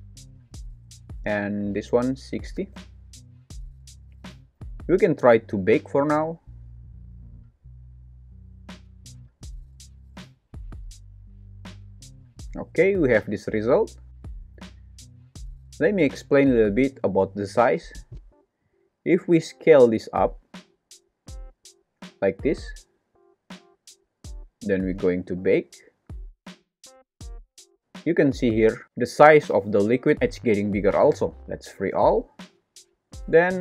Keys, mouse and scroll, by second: 1.9 click, 4.6 super+s, 6.9-10.6 drag, 10.9 space, 13.6 space, 14.2 shift+Left, 17.0 click, 17.8 click, 18.6 click, 19.7 s, 25.3-30.1 drag, 27.7 space, 30.3 space, 32.0 click, 33.5 alt+z.